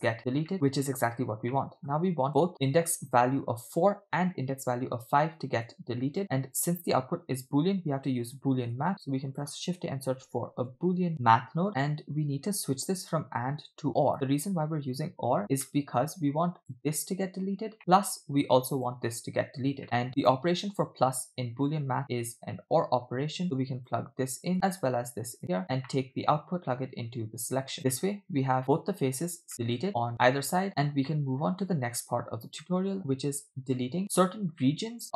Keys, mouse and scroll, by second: 1.4 scroll down 2, 1.5 middle click, 2.3 click, 2.5 click, 5.7-6.7 drag, 7.0-7.3 scroll up 2, 8.7 shift+a, 10.4 o, 11.1 BackSpace, 11.7-12.3 scroll up 4, 13.3-14.1 drag, 15.4 scroll down 2, 15.7 middle click, 16.6 click, 17.8 middle drag, 18.8 click, 20.0 middle click, 20.3 shift+click, 23.4-24.0 drag, 24.5 click, 25.4 click, 25.9 middle click, 26.6-27.8 drag, 28.0-29.1 middle drag, 29.5-30.8 middle drag, 31.1 middle click, 32.2 scroll down 2, 32.6 middle click, 34.7 middle click.